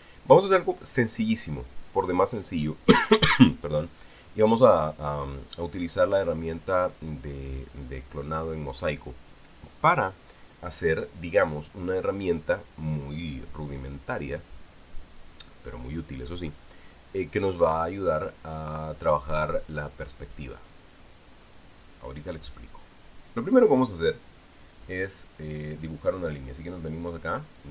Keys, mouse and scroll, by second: 25.4 click.